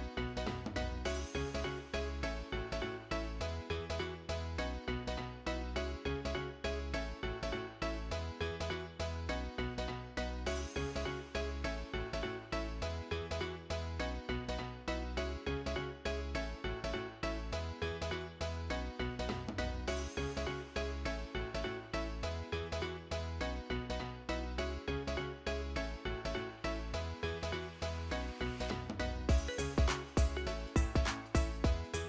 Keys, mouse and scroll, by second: 0.0-0.8 typing, 3.1-4.1 typing.